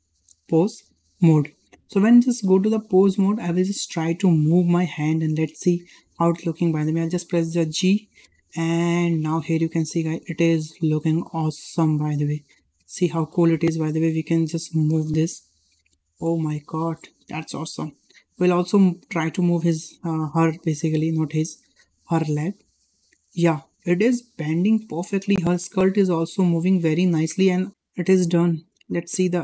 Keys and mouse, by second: 3.0 shift+middle drag, 4.3 click, 5.3 shift+middle drag, 7.5 g, 13.7-14.2 middle drag, 14.3 g, 17.4 middle drag, 17.9 shift+middle drag, 18.4 middle drag, 19.4-20.6 middle drag, 20.8 shift+middle drag, 21.2-22.2 middle drag, 22.5 g, 25.9 g, 28.2-28.9 middle drag.